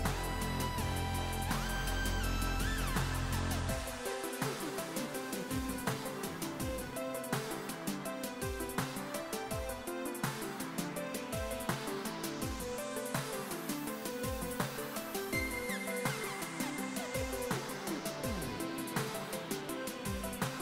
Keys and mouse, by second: 6.1 click, 10.5 click, 13.7 click, 16.2 1, 16.3 click, 17.2 click, 19.4 click.